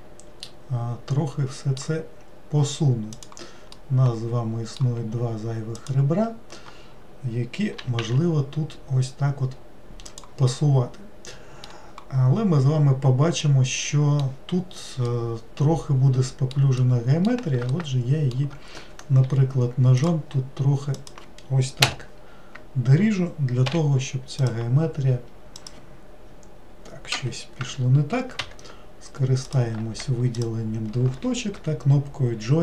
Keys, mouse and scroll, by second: 3.1 click, 3.7-5.7 middle drag, 5.7 shift+click, 7.8 g, 10.5-19.2 middle drag, 19.2 k, 29.5 click, 30.3 shift+click.